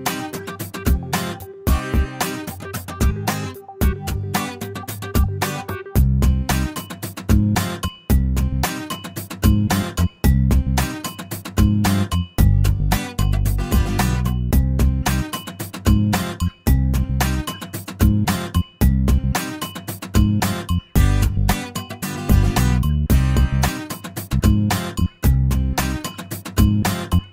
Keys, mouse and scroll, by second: 0.1 shift+o, 0.6 shift+middle click, 1.1 shift+middle click, 3.9 click, 5.0 click, 5.6 shift+o, 6.0 shift+middle click, 6.5 shift+scroll down 1, 6.7 shift+middle click, 7.6-7.9 scroll up 1, 9.0 click, 9.7 click, 10.2 shift+o, 10.6 shift+scroll down 1, 10.9 shift+middle click, 11.6-12.3 shift+scroll down 2, 12.1 middle click, 12.3-12.9 middle drag, 13.1 middle click, 13.9 middle click, 15.2 click, 17.0 click, 18.8 click, 20.2 click, 21.9 click, 23.8 click, 25.6-26.6 scroll up 2.